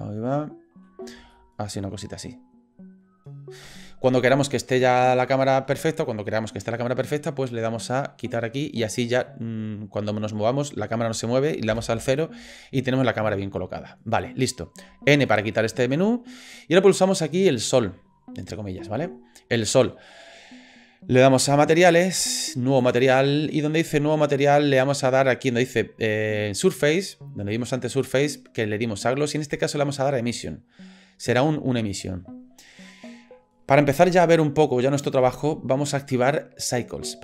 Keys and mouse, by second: 1.3 shift+click, 1.6-3.5 shift+middle drag, 8.2 click, 9.2 click, 9.5-10.9 middle drag, 11.7 KP_0, 15.2 n, 16.8 click, 21.9 click, 22.9 click, 28.2-30.5 drag.